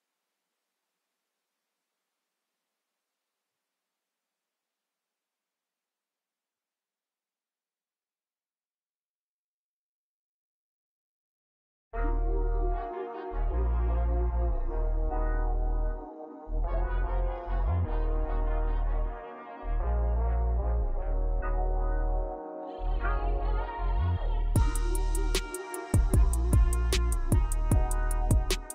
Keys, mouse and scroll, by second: 0.6-2.4 middle drag, 2.4-4.0 drag, 4.0-5.7 scroll up 5, 5.7-7.8 drag, 7.9 scroll down 3, 8.6 Tab, 9.0 click, 11.3 scroll down 1, 12.4 scroll down 3, 14.0 ctrl+s, 14.6-23.6 middle drag, 26.5 n, 28.4 click.